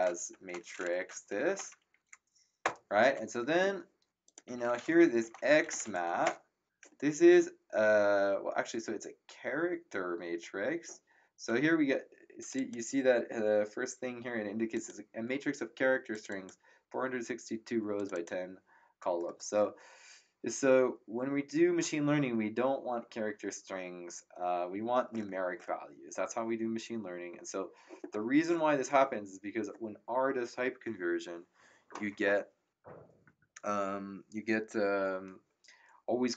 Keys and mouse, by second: 0.0-1.3 typing, 1.0 End, 2.6 ctrl+Return, 4.2 click, 4.2-6.3 typing, 12.4 click, 14.7 click, 16.1 click, 17.9 click.